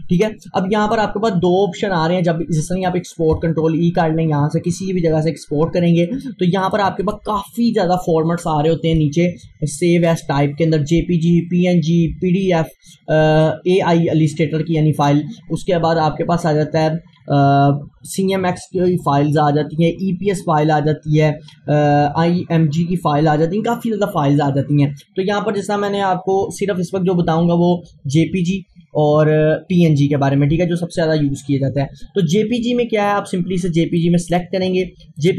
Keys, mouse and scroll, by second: 6.1 click, 34.0-35.3 drag.